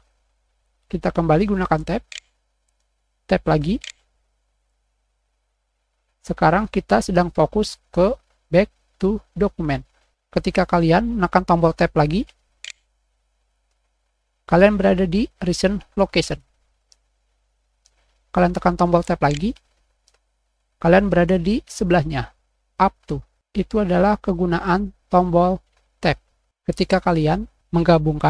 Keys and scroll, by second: 2.0 Tab, 3.7 Tab, 12.5 Tab, 16.6 `, 16.8 Caps_Lock, 17.0 Tab, 19.2 Tab.